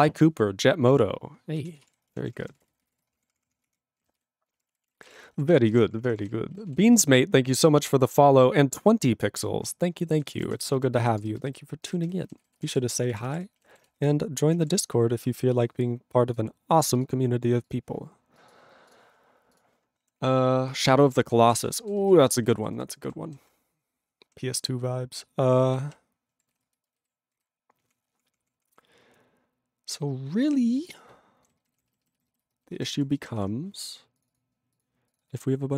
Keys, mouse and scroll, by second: 1.5 ctrl+a, 1.7 ctrl+space, 1.8 ctrl+e, 2.1 ctrl+p, 2.1 ctrl+a, 2.3 ctrl+p, 2.3 ctrl+space, 2.4 ctrl+e, 2.7 ctrl+n, 2.7 ctrl+e, 2.8 ctrl+n, 2.9 ctrl+g, 3.0 ctrl+space, 3.1 ctrl+p, 3.6 Tab, 4.1 ctrl+s, 4.5 ctrl+space, 4.6 ctrl+n, 5.0 ctrl+e, 5.0 ctrl+g, 5.5 ctrl+s, 5.6 ctrl+space, 5.7 ctrl+a, 5.7 ctrl+p, 6.2 ctrl+g, 6.2 ctrl+e, 6.7 ctrl+s, 10.1 ctrl+a, 10.3 ctrl+space, 10.4 ctrl+n, 10.5 ctrl+e, 10.6 ctrl+n, 10.7 ctrl+e, 10.7 ctrl+n, 10.9 ctrl+g, 11.2 ctrl+space, 11.6 ctrl+alt+b, 12.1 ctrl+g, 12.4 ctrl+s, 12.5 ctrl+space, 12.5 ctrl+e, 12.6 ctrl+n, 13.1 ctrl+e, 13.3 ctrl+g, 13.7 ctrl+s, 18.9 ctrl+s, 19.6 click, 20.2 ctrl+s, 20.7 ctrl+space, 21.1 ctrl+alt+b, 21.2 ctrl+g, 21.6 ctrl+s, 21.7 ctrl+space, 22.2 ctrl+alt+f, 22.6 ctrl+s, 23.0 ctrl+g, 23.4 ctrl+s, 25.8 ctrl+p, 25.8 ctrl+e, 26.5 ctrl+s, 26.6 ctrl+space, 27.1 ctrl+alt+b, 27.3 ctrl+g, 27.8 ctrl+p, 30.1 ctrl+f, 30.3 ctrl+e, 31.0 ctrl+n, 31.4 ctrl+b, 31.7 ctrl+p, 31.7 ctrl+b, 32.4 ctrl+space, 32.8 ctrl+alt+f, 32.9 ctrl+g, 33.3 ctrl+s, 34.2 click, 34.2 click, 34.3 double click, 34.3 double click, 34.7 click, 34.8 click, 35.1 click, 35.1 click, 35.2 double click, 35.3 double click.